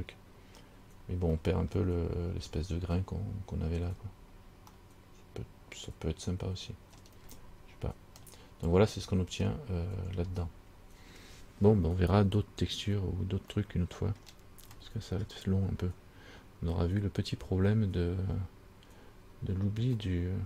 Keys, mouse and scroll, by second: 0.9-1.5 scroll down 1, 1.5 scroll down 1, 1.7 middle click, 2.2-2.9 scroll up 6, 4.0 scroll down 3, 4.9 middle click, 7.4 scroll down 2, 8.4 middle click, 13.8 middle click, 15.0 middle click, 18.6-20.1 scroll down 5, 20.2 middle click.